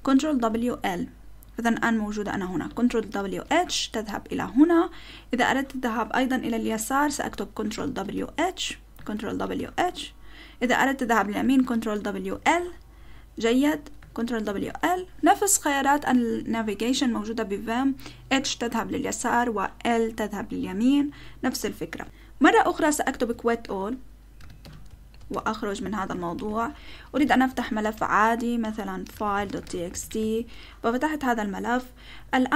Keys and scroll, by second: 0.2 ctrl+w, 0.5 ctrl+l, 3.1 ctrl+w, 3.5 h, 7.8 ctrl+w, 8.1 h, 9.1 ctrl+w, 9.5 h, 11.7 ctrl+w, 12.3 l, 14.2 ctrl+w, 14.5 l, 23.1 shift+;, 24.1-27.8 typing, 25.3 Return, 28.9-30.6 typing.